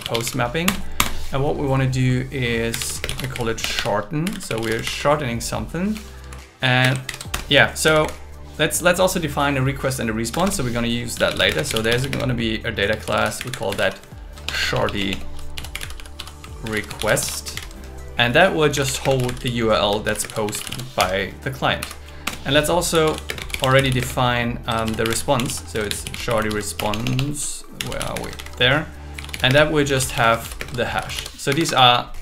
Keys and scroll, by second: 0.6 Return, 3.0 space, 3.6 BackSpace, 4.8 shift+8, 6.2 Right, 6.8 space, 7.0 alt+8, 7.3 Return, 7.8 Down, 10.3 Return, 11.5 space, 12.1 space, 13.0 shift+s, 14.4 BackSpace, 16.1 BackSpace, 16.6 shift+r, 17.5 shift+8, 19.0 space, 20.2 shift+space, 21.0 Escape, 21.8 Right, 22.2 Return, 23.2 space, 25.7 shift+r, 26.8 BackSpace, 28.4 shift+8, 29.6 space, 30.6 shift+space, 30.6 shift+s, 31.5 Escape.